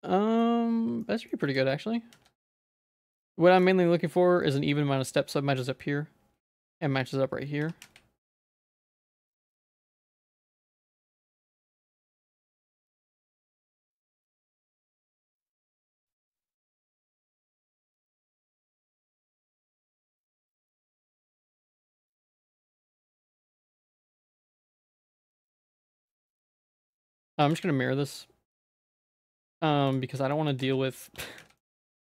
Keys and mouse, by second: 0.0 middle click, 1.2 middle click, 1.7 z, 2.2 z, 2.7 middle click, 3.6 click, 4.5 shift+middle click, 7.6 3, 7.9 z, 8.3 click, 9.1-10.2 shift+drag, 11.0 shift+click, 12.1 shift+click, 13.5-15.2 shift+drag, 15.6 shift+middle click, 16.5 shift+middle click, 17.3 shift+click, 19.2 shift+middle click, 20.7 ctrl+click, 21.8 x, 22.3 z, 23.3 middle click, 24.0 z, 24.5 middle click, 25.0 shift+middle click, 25.5 middle click, 26.3 3, 26.9 middle click, 27.2 Tab, 27.5 alt+x, 28.9 middle click, 29.4 alt+x, 29.4 alt+space, 30.3 middle click, 30.6 z, 31.2 Tab, 31.4 z, 31.6 middle click, 32.0 shift+middle click.